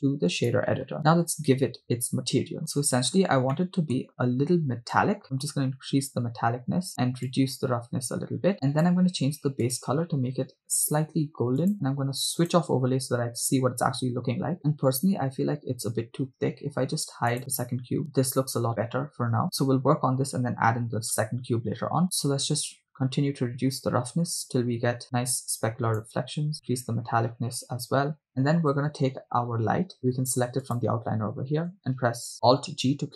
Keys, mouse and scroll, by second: 2.2-2.6 scroll up 3, 3.2 scroll up 1, 3.6 middle click, 5.0-8.9 drag, 9.7 click, 12.6 click, 17.4 click, 18.0 right click, 22.0 shift+middle click, 23.0-26.1 drag, 26.5-27.6 drag, 28.3 click, 30.6 click, 32.8 alt+g.